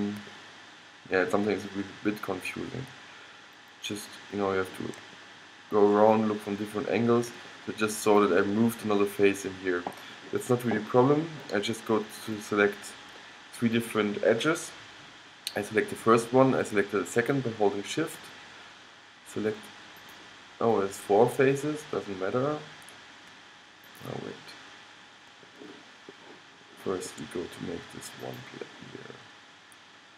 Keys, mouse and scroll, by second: 2.5 middle click, 3.7-5.3 middle drag, 5.7 middle click, 7.1-9.5 middle drag, 12.3-14.2 drag, 18.3-22.5 drag, 24.0-25.8 drag, 25.8 middle click, 27.1-28.3 middle drag, 28.3-30.1 drag.